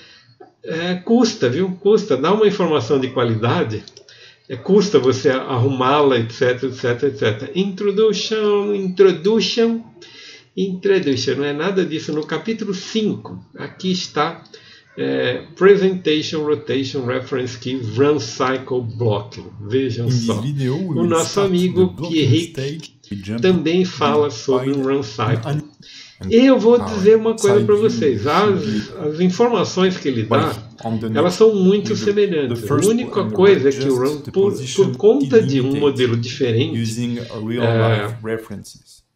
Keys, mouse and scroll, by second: 28.8 click, 29.1 KP_3, 29.7 shift+middle click, 29.7 click, 30.3 click, 30.5 alt+r, 31.0 middle click, 33.6 click, 33.6 middle click, 33.6 r, 33.8 g, 34.7 click, 34.8 alt+middle click, 35.1 click, 35.1 middle click, 35.3 click, 35.5 alt+middle click, 35.6 alt+r, 35.7 middle click, 36.2 click, 36.3 click, 36.6 r, 37.4 KP_3, 38.2 click, 38.5 r.